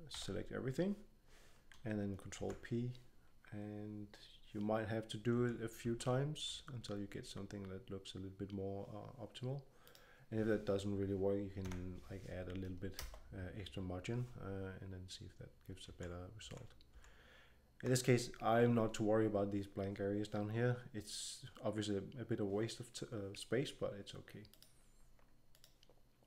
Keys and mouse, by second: 0.0 a, 2.4 ctrl+p, 5.3 ctrl+p, 5.8 ctrl+p, 9.8-12.9 drag, 15.8 ctrl+p, 16.4 ctrl+p, 16.9 ctrl+p, 24.4-26.2 drag.